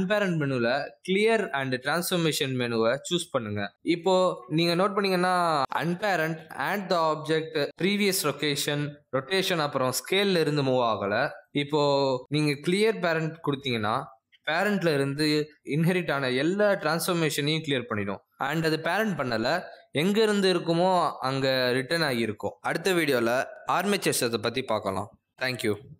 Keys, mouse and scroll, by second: 8.4 click, 8.6 g, 9.1 r, 10.0 g, 12.7 ctrl+z, 13.2 ctrl+z, 13.7 right click.